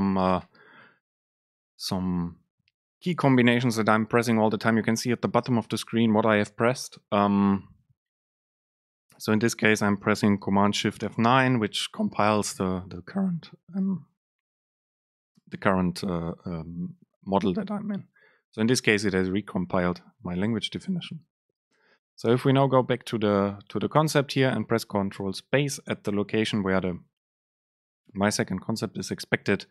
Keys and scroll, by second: 24.1 super+space.